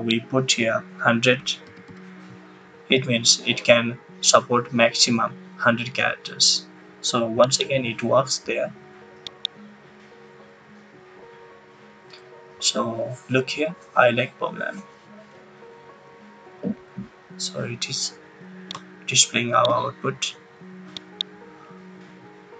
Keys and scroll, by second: 1.1-2.3 typing.